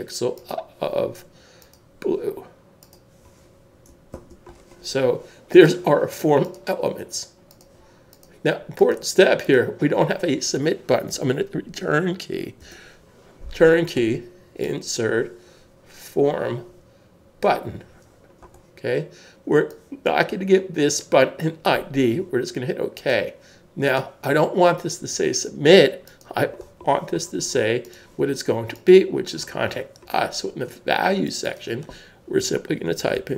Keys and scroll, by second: 0.3 1, 4.1 super+s, 12.6 Return, 32.9-33.3 typing.